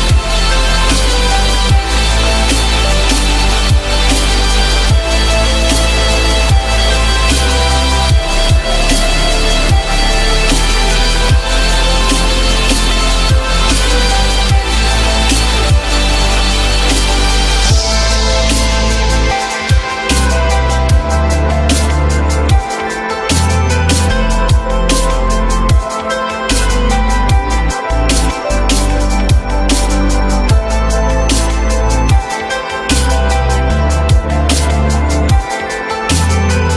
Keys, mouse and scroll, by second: 17.9 j, 19.7 t, 20.3 z, 21.5 F3, 28.7 ü, 33.1 F3, 33.9 alt+middle click, 34.7 alt+middle click, 35.1 alt+middle click.